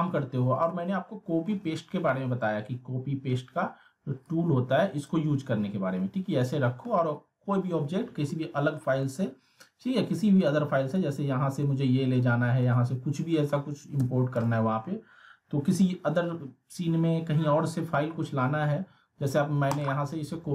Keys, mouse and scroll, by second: 4.2-5.2 drag, 8.0 scroll down 1, 8.3-8.9 alt+middle click, 9.2 alt+scroll up 1, 10.4 click, 11.6-12.2 alt+middle click, 12.3 scroll down 1, 12.6-13.5 alt+middle drag, 14.0 z, 14.7 alt+middle click, 19.7 click.